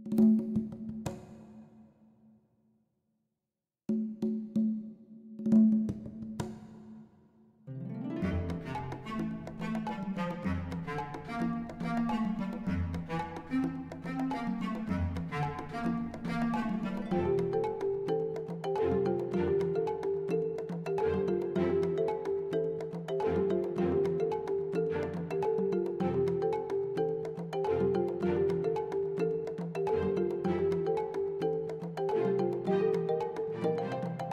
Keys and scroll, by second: 1.4 Tab, 8.9 Tab, 9.7 shift+z, 12.0 1, 15.5 g, 15.9 y, 17.2 shift+z, 25.3 3, 28.1 shift+d, 30.1 p, 31.5 Tab, 32.0 shift+z.